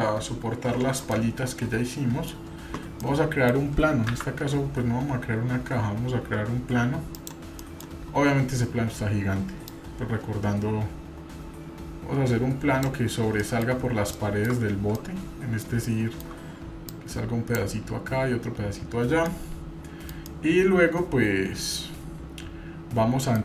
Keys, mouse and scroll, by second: 1.1-2.3 middle drag, 3.0-3.5 middle drag, 4.1 shift+a, 7.3-7.8 middle drag, 8.3 scroll down 4, 8.5 scroll up 2, 9.7-12.9 drag, 9.7-10.3 scroll up 1, 13.4 middle drag, 13.8-14.7 scroll up 4, 14.1-14.5 shift+middle drag, 15.0-16.3 shift+middle drag, 16.9 click, 19.3 middle click, 20.3-23.4 middle drag.